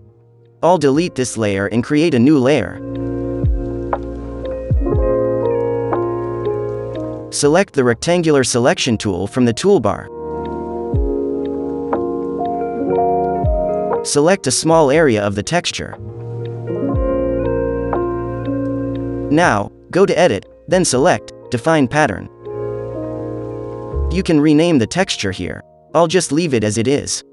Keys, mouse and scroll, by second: 5.0-6.0 drag, 7.8-8.8 drag, 11.3-13.3 middle drag, 11.3 scroll up 2, 11.4 scroll, 12.6-13.3 scroll up 2, 14.5-18.8 drag, 20.3-21.4 drag, 23.8-24.9 drag.